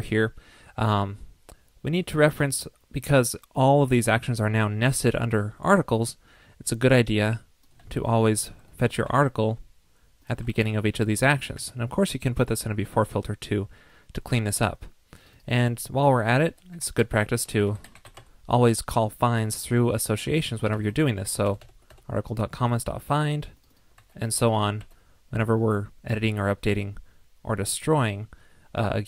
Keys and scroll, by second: 7.8 super+c, 9.0 super+v, 10.4 super+v, 21.5 alt+shift+Left, 22.6 super+c, 24.2 super+v, 25.1 super+v.